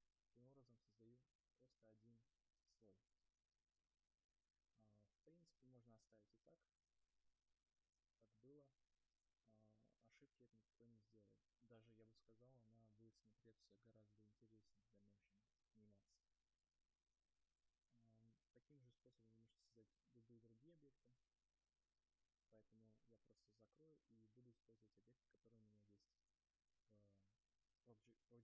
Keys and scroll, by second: 6.2 ctrl+z, 7.7 ctrl+alt+z, 8.5 ctrl+z.